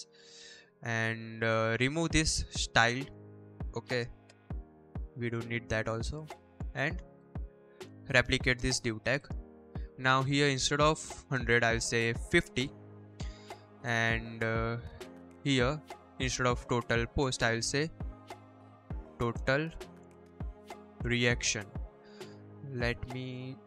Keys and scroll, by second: 3.8 BackSpace, 4.3 ctrl+s, 7.6 ctrl+d, 8.1 ctrl+s, 11.1-12.8 typing, 12.9 Escape, 17.0-21.3 typing.